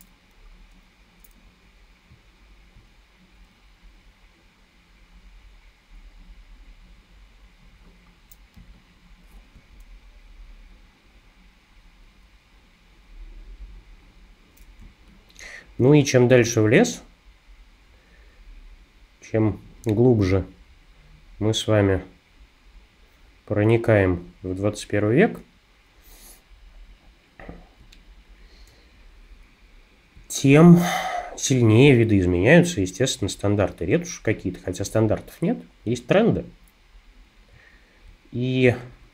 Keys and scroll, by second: 8.6 space, 14.9 space.